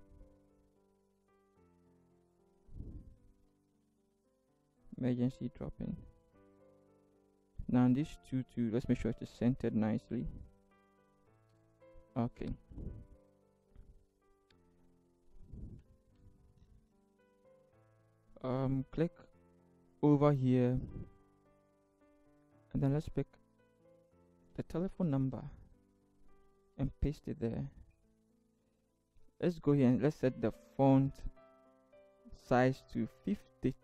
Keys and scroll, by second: 3.9 ctrl+v, 9.0 ctrl+t, 9.6 ctrl+shift+t, 10.2 ctrl+shift+Right, 11.5 ctrl+shift+Return, 15.9 ctrl+=, 18.9 t, 24.9 ctrl+c, 26.8 ctrl+v, 33.2-33.8 typing.